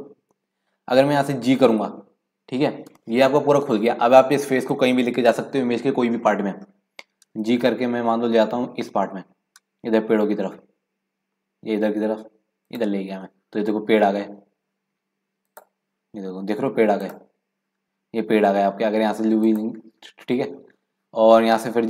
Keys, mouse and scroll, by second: 7.3 g, 15.0-15.5 scroll down 1, 15.5 click, 17.0 click, 17.8 click, 19.5 drag.